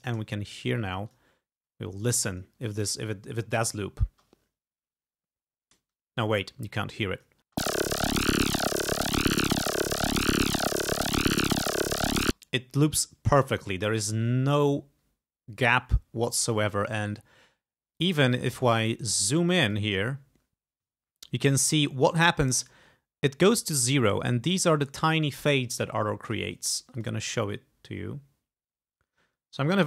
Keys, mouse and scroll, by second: 1.1 click, 2.1 click, 4.1 space, 5.8 space, 7.2 click, 7.5 space, 12.3 space, 14.7-15.0 ctrl+scroll up 2, 15.6-15.9 ctrl+scroll up 2, 16.2 ctrl+scroll up 2, 17.0 ctrl+scroll down 2, 18.0 click, 18.6 click, 19.4 click, 21.1-21.4 ctrl+scroll up 2, 21.5-21.9 ctrl+scroll down 2, 22.7-25.1 ctrl+drag, 27.0-28.1 drag.